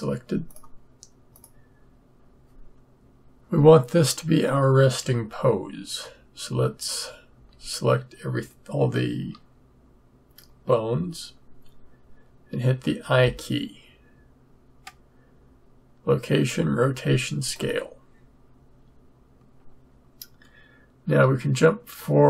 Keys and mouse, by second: 0.4 click, 7.3 a, 13.0 i, 21.2-22.2 Right.